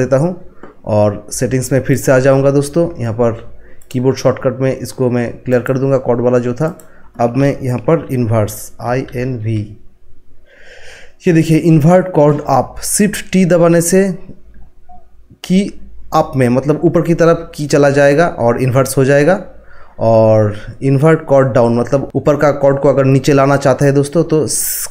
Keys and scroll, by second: 8.6-9.9 typing.